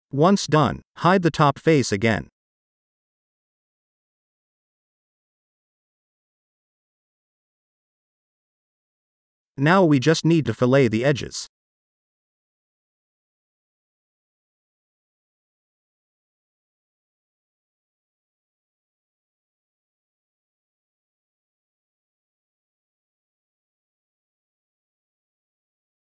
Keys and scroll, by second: 0.4 space, 4.5-5.5 typing, 7.5 ctrl+s, 13.9 2.